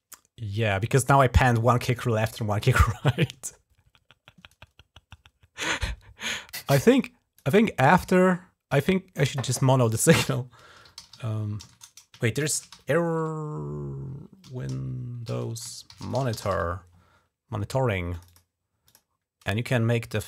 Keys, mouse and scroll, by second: 6.5 click, 7.8 right click, 9.1 click, 10.1-16.8 typing, 15.1 ctrl+a, 17.9 click, 18.7 click, 20.0-20.2 drag.